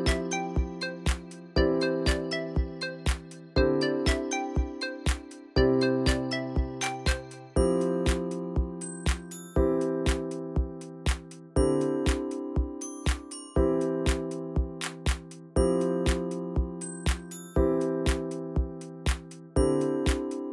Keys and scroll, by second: 0.0-1.8 typing, 16.0 ctrl+v.